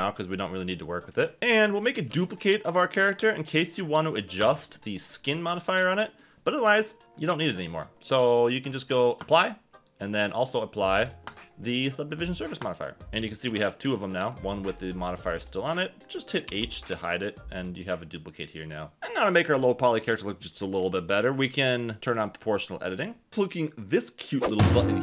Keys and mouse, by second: 1.4 Tab, 2.1 shift+d, 4.4 Escape, 8.7 click, 11.3-12.7 drag, 13.4 g, 14.2 Escape, 16.5 h.